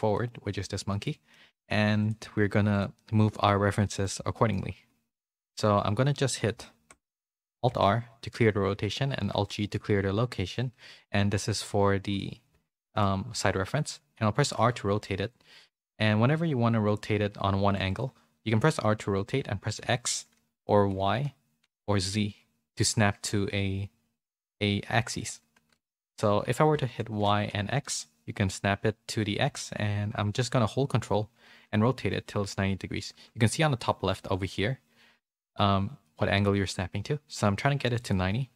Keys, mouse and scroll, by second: 0.1-1.2 middle drag, 2.0 click, 2.7 click, 3.8 middle click, 4.3 shift+middle click, 7.7 alt+r, 9.3 alt+g, 12.8 shift+middle click.